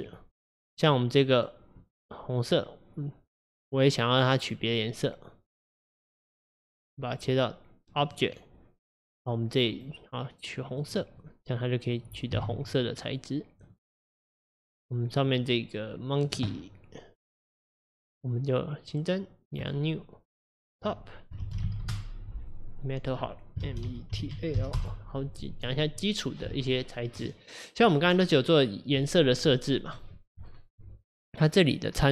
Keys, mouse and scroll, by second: 1.0 middle click, 1.9 click, 3.7-6.7 drag, 7.1-11.3 drag, 11.3-12.4 middle drag, 12.4 KP_0, 13.7 click, 14.4 click, 19.7-25.8 drag, 31.5-32.1 scroll down 2.